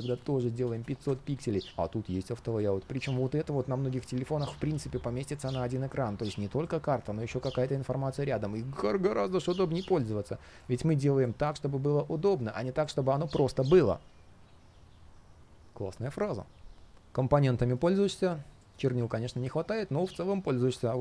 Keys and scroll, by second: 1.7 shift+super+z, 17.0 ctrl+shift+3.